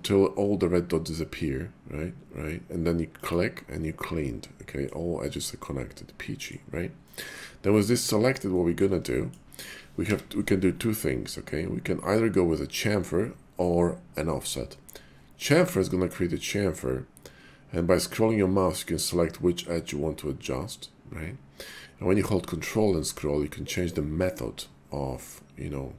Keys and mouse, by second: 3.2 click, 4.0 middle click, 5.6 middle click, 7.0 middle click, 8.5 middle click, 9.1 shift+middle click, 10.0 y.